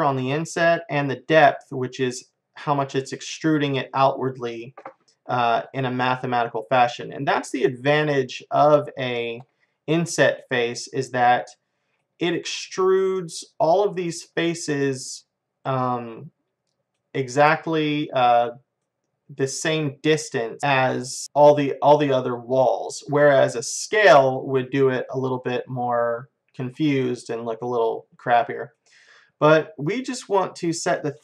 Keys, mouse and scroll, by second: 1.5-3.8 drag, 5.3-5.7 scroll down 1, 5.7-7.6 middle drag, 8.1 middle click, 8.7-13.0 middle drag, 13.4-17.3 middle drag, 17.9-20.6 middle drag, 21.2-22.5 middle drag, 25.1-29.8 middle drag, 30.7-31.2 drag.